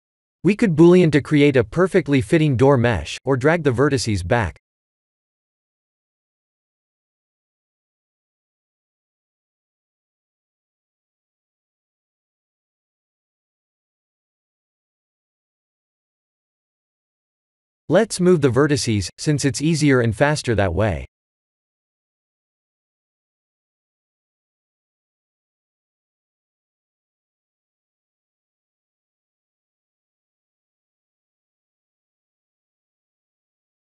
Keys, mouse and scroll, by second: 1.8 click, 2.9-4.5 scroll up 3, 4.5 click, 8.8 p, 10.4 Tab, 10.7 a, 11.5 p, 14.5 Tab, 15.8 click, 16.5 click, 17.4 Tab, 18.4 click, 18.7 b, 19.8 click, 20.1 shift+z, 20.5 b, 22.1 g, 25.0 KP_3, 26.3 shift+z, 26.8 middle click, 27.6 middle click, 28.2 middle click, 30.4 click, 30.9 b, 32.8 b.